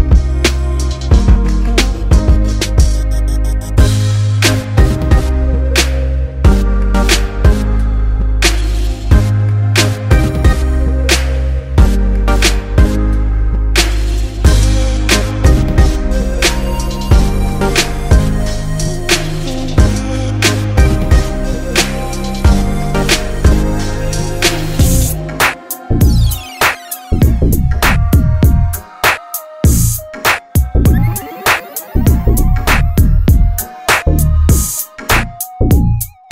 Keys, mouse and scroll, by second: 8.9-10.2 right drag, 13.6-15.4 drag, 16.2-18.7 drag, 26.6-31.2 drag.